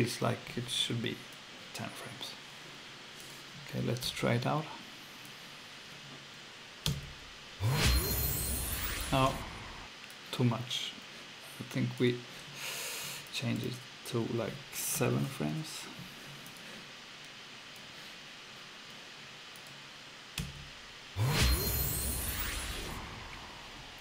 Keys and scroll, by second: 4.0 F1, 6.8 F2, 9.2 F1, 14.9 7, 15.5 Return, 20.4 F2.